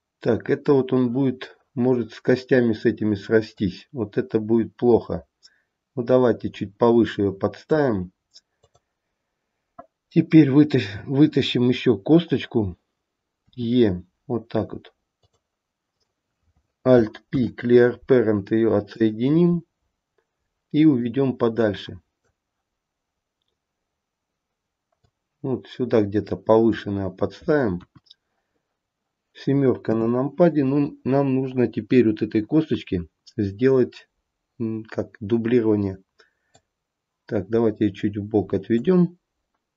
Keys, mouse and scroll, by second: 3.7 click, 8.7 click, 13.6 e, 16.0 click, 17.4 alt+p, 21.1 click, 25.1 click, 28.0 KP_1, 30.1 KP_7, 30.9-33.1 scroll down 1, 36.6 click.